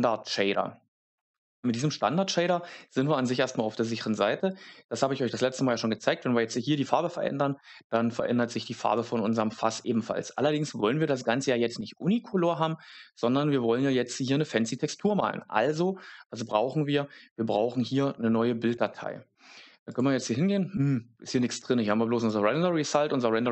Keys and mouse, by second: 8.8 Tab, 10.2 Tab, 20.0-22.2 drag.